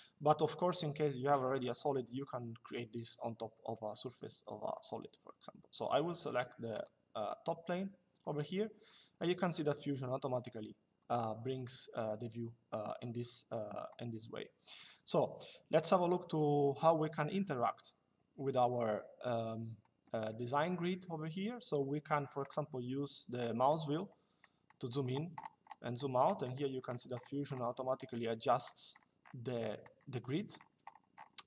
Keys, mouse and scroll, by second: 6.5 click.